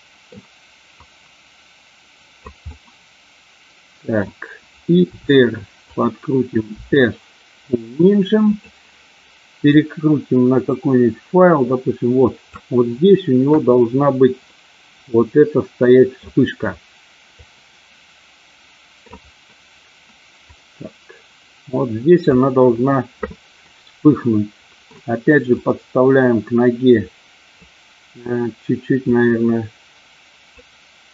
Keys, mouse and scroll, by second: 0.9-2.4 drag, 2.7-4.3 middle drag, 5.2 r, 5.8 click, 6.7 s, 8.4 click, 9.8-12.5 drag, 13.4 KP_1, 14.5-16.2 middle drag, 17.3-19.0 drag, 20.6-22.3 drag, 23.6-24.9 middle drag, 25.6-27.6 drag, 29.0-30.4 drag.